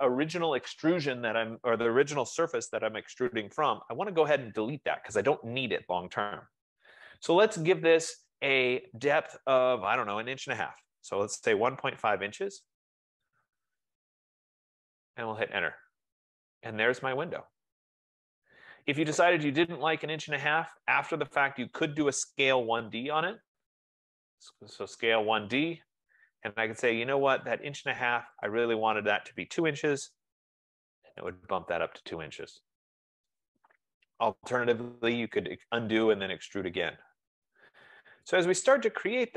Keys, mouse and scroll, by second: 1.4 F15, 11.0-12.2 typing, 14.7 Return, 18.3-18.7 scroll, 19.0-19.5 scroll, 19.8-20.2 scroll, 20.2 click, 21.6 scroll, 22.5 scroll, 22.5-25.0 typing, 26.3-26.6 typing, 27.8 click, 28.8 click, 30.3-31.1 typing, 31.8 click, 36.0-37.0 drag, 39.1 right click.